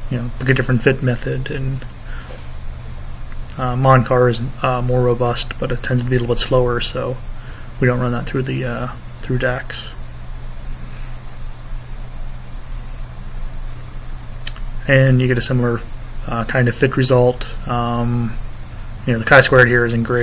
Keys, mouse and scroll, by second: 17.1 click, 18.5 Up, 19.8 Down.